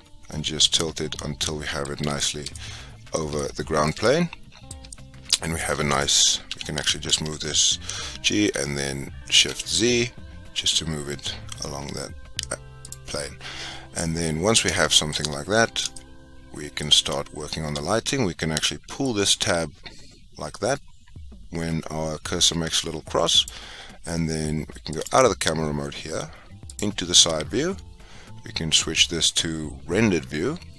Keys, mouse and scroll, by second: 5.9 click, 6.4 g, 14.7-19.2 shift+middle drag, 19.2-22.0 drag, 24.9-26.7 drag.